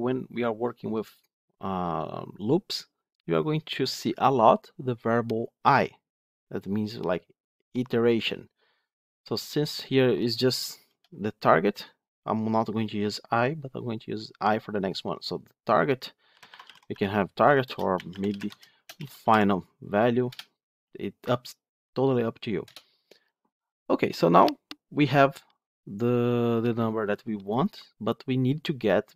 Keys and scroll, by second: 17.5 ctrl+BackSpace.